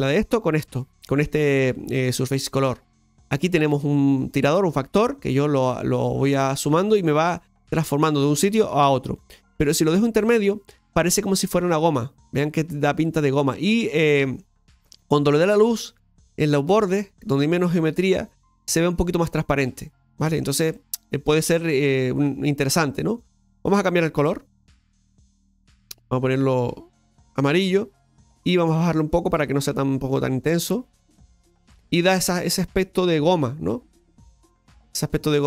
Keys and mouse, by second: 4.8-9.8 drag, 11.0-20.4 middle drag, 21.2-21.7 middle drag, 23.2 click, 28.6-30.9 drag, 31.4-33.4 middle drag, 33.9 right click, 34.7-35.4 middle drag.